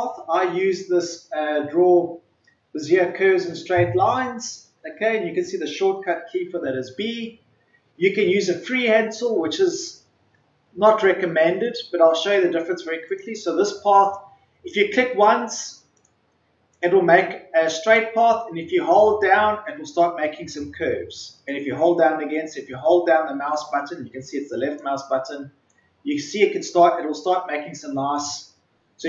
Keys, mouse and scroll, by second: 13.0-29.0 drag.